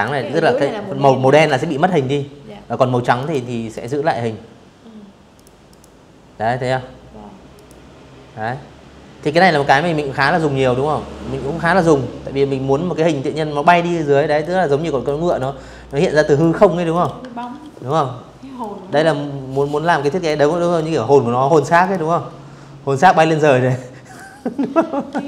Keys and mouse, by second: 0.9 click, 1.4 click, 3.0 click, 3.4 click, 5.2 click, 12.1 click, 12.9 click, 13.5 click, 14.6 click, 15.0 ctrl+z, 15.5 click, 17.2 shift+click, 18.4 click, 19.4 click, 20.6-21.8 drag, 22.8 ctrl+z, 23.0 click, 24.4 click.